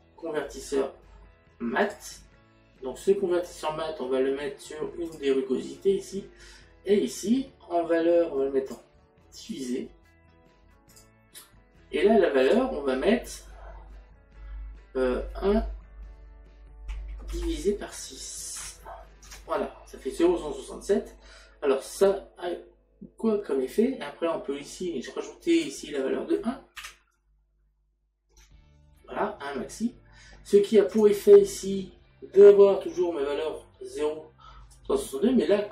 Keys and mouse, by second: 1.9 click, 5.1 click, 8.7 click, 11.0 click, 12.5 click, 16.9 KP_1, 18.6 KP_6, 21.9 middle click, 25.6 click, 26.9 KP_1, 31.0 click, 34.8 click.